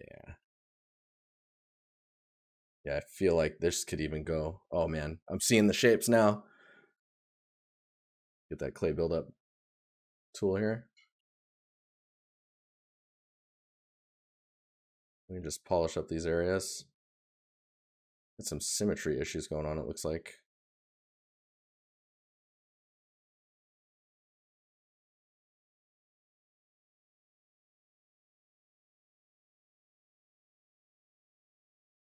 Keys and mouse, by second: 0.0 right click, 2.4 right click, 6.8 right click, 8.2 right click, 9.9 right click, 12.1 right click, 13.6 right click, 16.1 right click, 19.2 right click, 23.3 right click, 28.4 right click, 31.4 right click.